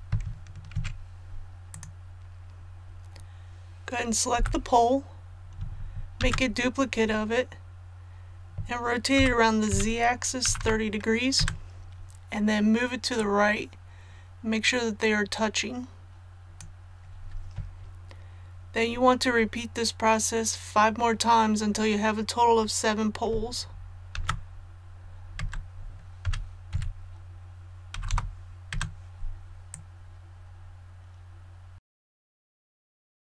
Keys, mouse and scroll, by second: 1.7 click, 4.3 l, 6.2 shift+d, 9.1-10.6 typing, 13.1-16.7 drag, 24.1 shift+d, 26.2-26.7 typing, 27.9 KP_3, 28.1 KP_0, 29.7-31.9 drag, 32.0-33.4 typing, 32.1 click, 32.6 click, 32.8 click, 33.0 click, 33.2 click.